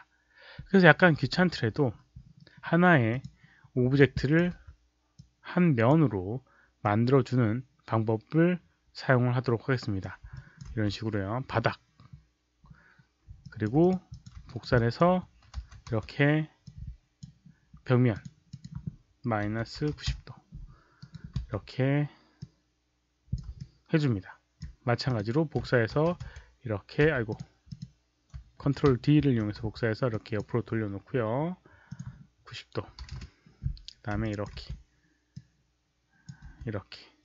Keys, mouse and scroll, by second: 3.0 click, 3.9 alt+click, 4.4 r, 5.1-5.8 drag, 6.7-9.9 drag, 10.3 alt+click, 10.6 w, 13.4 alt+click, 13.7 click, 14.0 click, 14.2-15.9 typing, 14.4 alt+right click, 14.7 alt+click, 15.5 ctrl+d, 16.6 click, 18.0 click, 18.4 click, 19.4 KP_Subtract, 19.7 KP_9, 19.9 KP_0, 20.5 Return, 20.9 right click, 21.1 Return, 21.1 KP_Subtract, 21.1 ctrl+d, 21.1 click, 21.1 KP_0, 21.1 KP_9, 21.1 e, 21.3 w, 22.3 click, 23.6 alt+click, 25.0 Return, 25.0 KP_Subtract, 25.0 alt+click, 25.0 right click, 25.0-26.9 typing, 27.2 click, 27.6 click, 29.2 ctrl+d, 29.5 e, 30.0 drag, 31.8 click, 32.8 KP_9, 32.9 KP_0, 33.0 Return, 33.9-35.1 typing, 34.2 alt+click, 35.3-36.2 drag, 36.4 w, 37.1-37.2 drag.